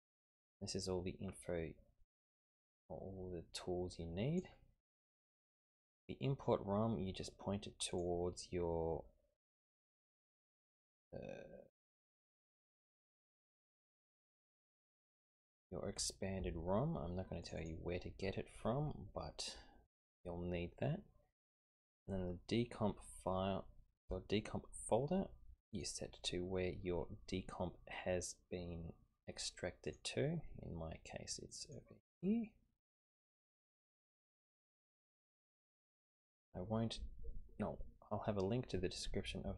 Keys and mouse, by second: 2.5-4.5 drag, 7.9 click.